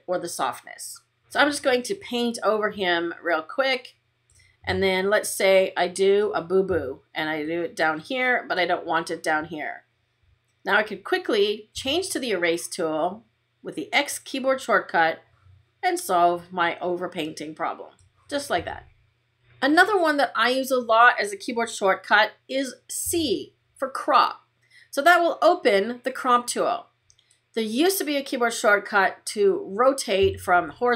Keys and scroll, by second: 11.6 x, 22.9 c.